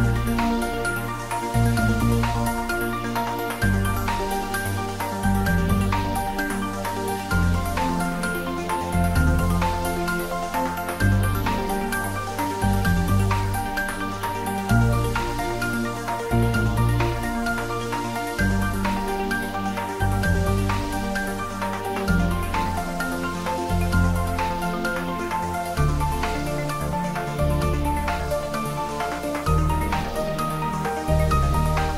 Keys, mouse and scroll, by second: 0.7 shift+click, 1.2 middle click, 2.1-3.4 ctrl+middle drag, 3.4 Tab, 3.7 ctrl+a, 4.2 click, 5.4 Tab, 5.9 ctrl+b, 9.6 click, 9.9 Caps_Lock, 11.1 ctrl+z, 13.0 click, 13.1 Tab, 13.4-14.7 middle drag, 15.0 shift+z, 15.2 ctrl+shift+middle click, 15.7 middle click, 16.2 s, 17.4-18.1 typing, 18.0 click, 18.4 ctrl+s, 18.7 ctrl+middle click, 19.7 click, 20.9 middle click, 21.5 ctrl+middle click, 22.2 ctrl+middle click, 22.6 middle click, 23.9 click, 24.4-25.9 middle drag, 25.9 ctrl+middle click, 26.4 middle click, 26.7 ctrl+middle click, 27.0 middle click, 27.9 click, 28.2 ctrl+middle click, 28.5 click, 29.0-29.8 typing, 30.6 click, 31.0 g.